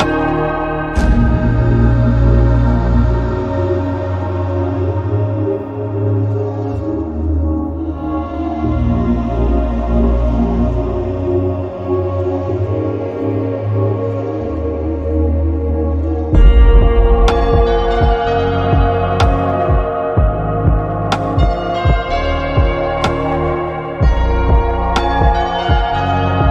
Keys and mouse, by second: 1.4 shift+middle click, 5.0-7.1 middle drag, 7.5 shift+middle click, 14.9 click, 20.2-21.2 drag, 22.6-25.1 drag.